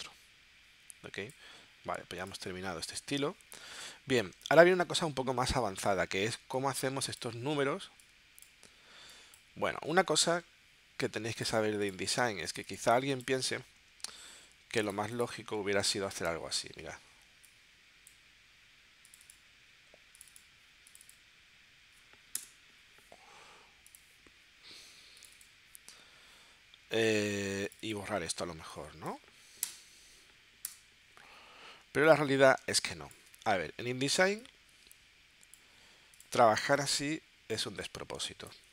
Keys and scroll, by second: 22.4 BackSpace, 29.7 Delete, 30.7 Delete, 32.6 space.